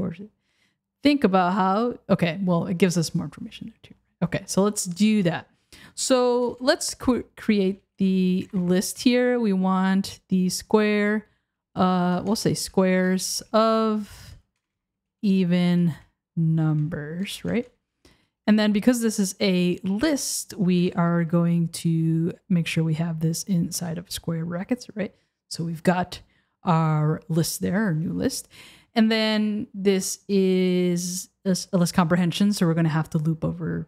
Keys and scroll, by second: 6.4 Return, 12.1 BackSpace, 14.2 BackSpace, 17.6 BackSpace, 20.8 BackSpace.